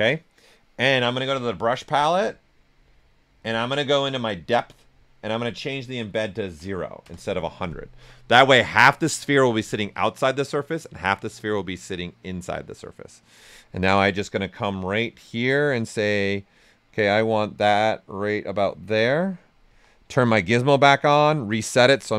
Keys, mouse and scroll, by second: 1.4 click, 1.4 typing, 6.4 0, 7.0 Return, 14.8 ctrl+Return, 15.0-17.5 ctrl+right drag, 17.5-19.6 drag, 19.6 w, 20.9 alt+click.